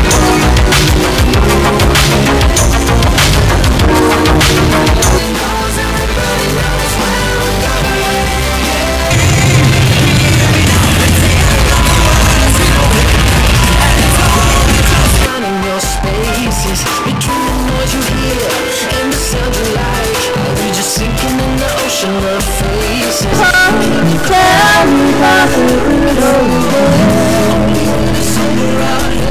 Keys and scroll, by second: 5.5 Page_Down, 15.3 Page_Down.